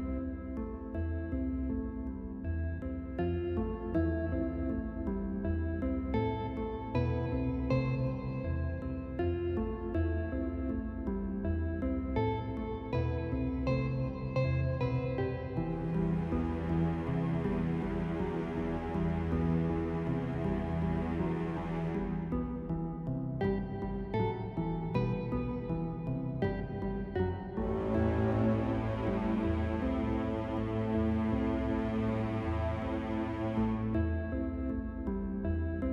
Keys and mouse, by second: 0.9 ctrl+r, 3.6 Tab, 5.1-6.2 right drag, 5.9 Tab, 9.8 ctrl+r, 11.3 ctrl+r, 13.6 ctrl+r, 15.2 ctrl+r, 15.4 ctrl+r, 18.8 ctrl+r, 19.1 ctrl+r, 22.4 ctrl+r, 24.5-25.9 middle drag, 25.9-27.0 drag, 27.0-29.8 right drag, 29.8 click, 30.4 right click, 30.6 middle click, 33.9 KP_7, 35.4 click, 35.8 shift+a.